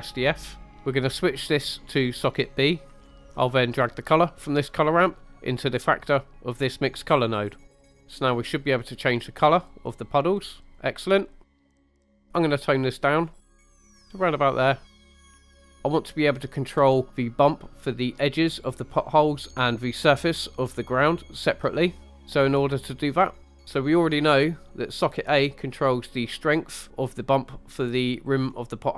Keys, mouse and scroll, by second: 0.6-1.3 scroll up 3, 1.9 click, 2.2-2.9 drag, 3.0 scroll down 2, 3.1 middle click, 3.3 right click, 3.9-7.3 drag, 8.8 click, 12.4 click, 15.0 scroll down 2, 15.1 shift+middle click, 15.5 shift+middle click, 15.7 scroll up 1, 19.5 scroll up 1, 22.0 scroll down 3, 22.1 middle click, 22.4 scroll up 3, 23.4 scroll up 2, 23.5 middle click, 23.6 click, 25.2 click.